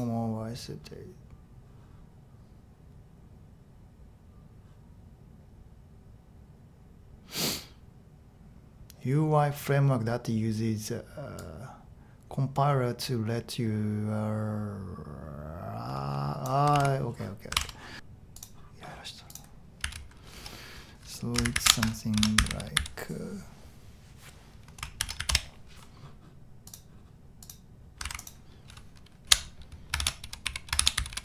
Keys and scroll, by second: 16.7 super+c, 17.6 super+Tab, 19.8 a, 21.5 alt+shift+super+v, 22.1-23.2 typing, 24.7-25.7 typing, 29.2 alt+super+v, 30.2 Escape, 30.4 Escape, 30.7 Escape, 30.9-31.2 typing.